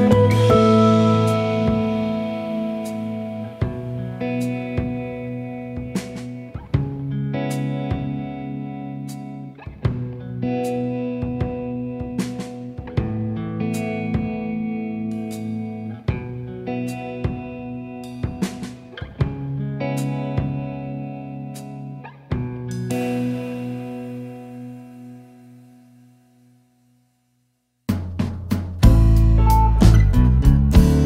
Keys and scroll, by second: 3.9 F1, 5.2 ctrl+d, 6.0 ctrl+*, 7.8-8.8 typing, 14.0 -, 14.3 space, 15.8 +, 16.3 space, 18.2 shift+F6, 23.2 BackSpace, 25.0 space, 28.9 F1, 30.0 F7, 30.9 F1.